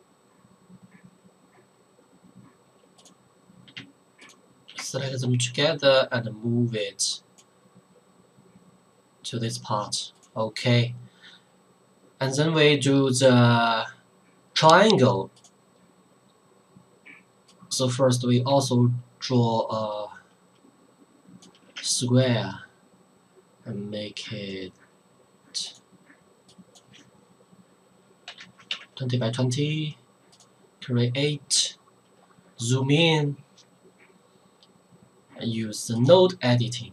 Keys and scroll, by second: 28.3 KP_2, 28.4 KP_0, 28.6 Tab, 28.7 KP_2.